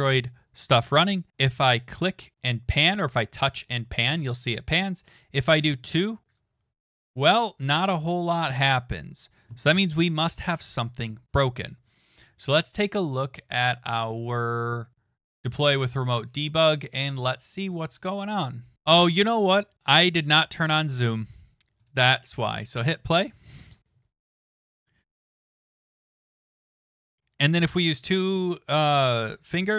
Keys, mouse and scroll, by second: 11.9 click, 13.1 click, 15.3 click, 16.5 click, 17.2 click, 17.6 click, 17.7 click, 18.0 click, 19.2 click, 20.7 click, 21.9 click, 22.4 click.